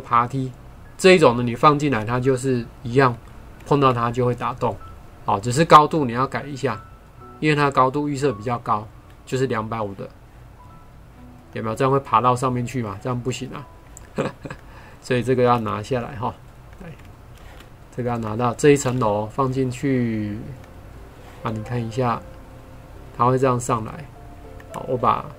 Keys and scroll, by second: 3.7 ctrl+4, 17.4 ctrl+x, 18.8 ctrl+v.